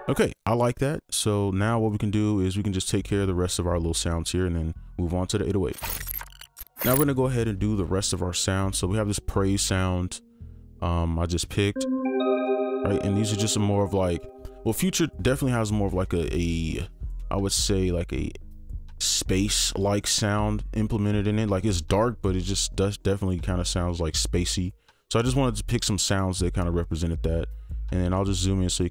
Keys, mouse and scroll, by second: 11.5 scroll down 1, 28.2-28.5 typing.